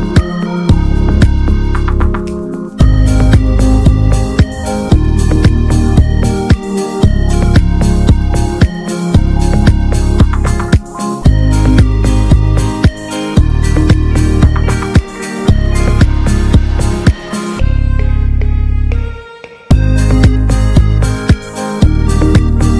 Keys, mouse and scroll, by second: 1.4-3.4 drag, 3.4-4.4 scroll down 4, 4.4-9.6 drag, 9.6 scroll down 3, 9.8-10.8 middle drag, 10.8-11.6 drag, 11.6 ctrl+s, 14.0 scroll up 1, 14.1-15.8 middle drag, 15.8-16.2 scroll up 3, 16.2-20.0 drag, 20.0-21.3 middle drag, 21.3-22.0 scroll up 2, 22.0 click, 22.3 Tab, 22.5-22.7 scroll up 3.